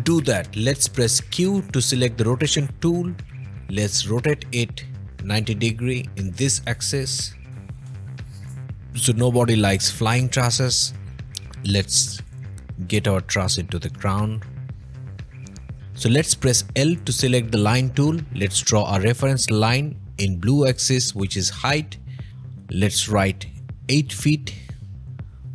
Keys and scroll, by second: 1.4 q, 3.4 Escape, 7.1 typing, 7.7 Return, 8.6 Escape, 9.8 o, 11.4 m, 22.3 i, 23.7-24.5 typing, 24.8 Return.